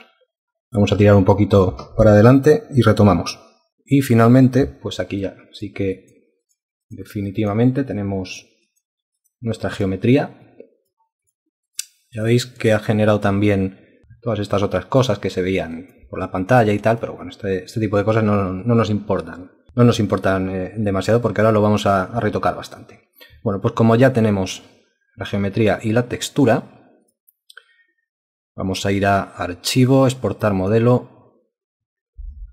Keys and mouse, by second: 5.6 super+Print, 12.2 super+Print, 32.4-32.5 typing.